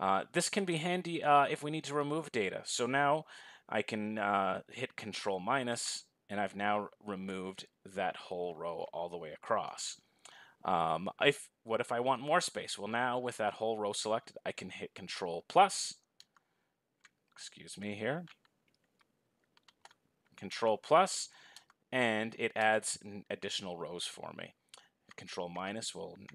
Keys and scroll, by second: 5.4 ctrl+-, 13.7 ctrl++.